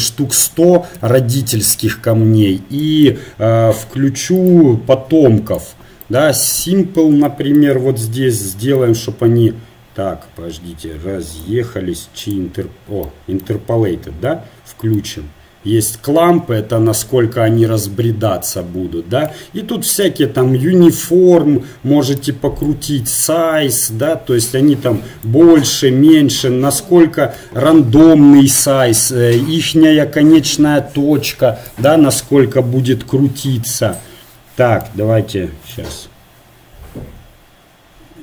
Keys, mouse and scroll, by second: 1.5 KP_0, 5.5 click, 6.3-7.3 right drag, 7.3 middle click, 8.9-16.9 drag, 20.1-21.7 drag, 22.7-24.9 drag, 29.1-30.8 drag, 33.8-38.2 drag.